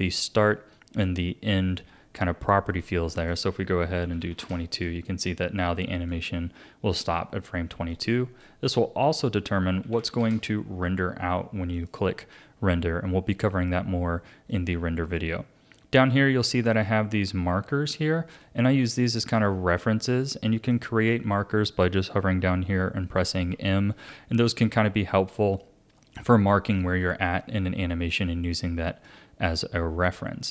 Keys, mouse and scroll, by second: 3.2-4.2 drag, 4.2 KP_2, 6.1-19.9 drag, 21.1-23.5 drag, 23.5 m, 24.6 ctrl+z, 25.5-28.6 drag.